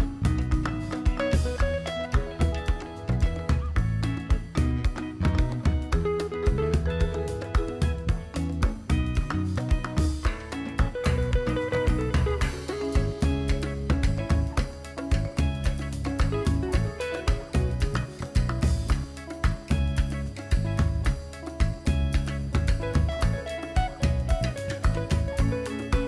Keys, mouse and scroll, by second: 0.3-3.1 drag, 3.1 alt+scroll up 1, 4.1 click, 4.8-9.1 drag, 9.1 alt+scroll down 1, 9.7 click, 9.8 right click, 10.4 click, 12.8 click, 14.8 alt+scroll up 1, 15.6 click, 16.0-16.4 alt+scroll down 1, 17.8-20.0 drag, 20.5-21.2 alt+scroll down 1, 21.2 alt+scroll up 1, 23.4 click.